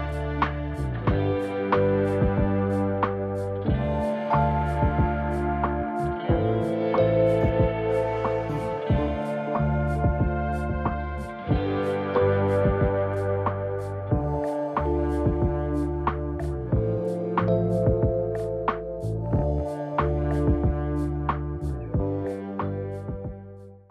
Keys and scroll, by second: 7.5 0.